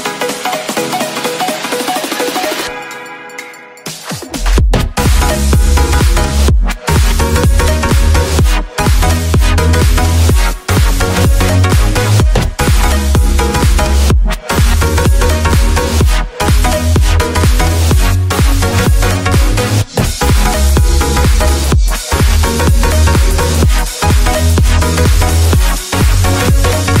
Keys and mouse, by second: 0.0 ctrl+r, 2.6 ctrl+b, 6.0-8.3 drag, 9.4 middle click, 10.9 s, 14.3 ctrl+r, 16.0 ctrl+KP_Add, 17.5 ctrl+i, 19.2 x, 21.2 Tab, 22.0-22.7 middle drag, 23.0 Tab, 23.8 a, 24.9-27.0 drag.